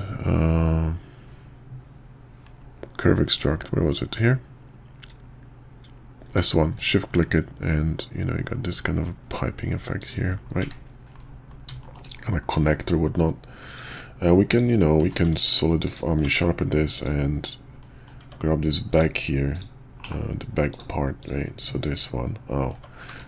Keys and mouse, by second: 11.1 KP_5, 11.8 shift+middle click, 12.1 middle click, 12.9 middle click, 13.7 click, 14.5 click, 15.0 q, 16.2 Tab, 16.9 click, 17.8 middle click, 18.2 Tab, 18.9 click, 19.5 click, 20.0 /, 20.7 click, 21.2-22.7 drag, 22.7 Tab, 23.1 q.